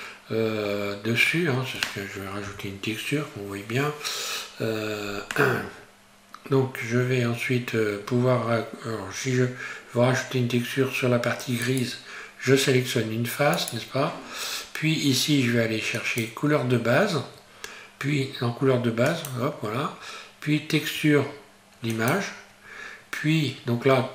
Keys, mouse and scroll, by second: 4.6-5.2 scroll down 1, 5.2 scroll up 1, 9.3-11.7 scroll up 1, 11.7 right click, 16.0 click.